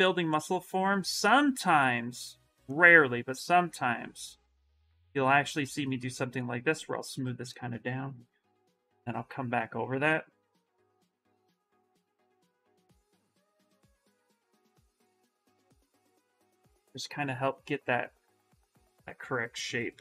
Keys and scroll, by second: 0.6 s, 1.5 s.